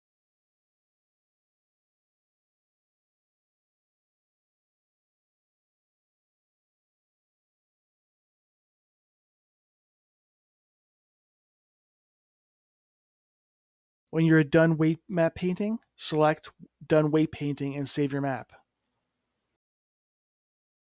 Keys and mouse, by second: 0.4 x, 0.7-2.3 drag, 1.1 x, 2.4-4.0 drag, 4.0 middle click, 5.7-7.2 middle drag, 8.8-10.3 middle drag, 10.3 middle click, 10.7 middle click, 12.5-14.1 middle drag, 14.7 click, 15.1 middle click, 15.4-16.8 middle drag, 16.9 click, 17.8-18.9 middle drag, 18.9-20.9 drag.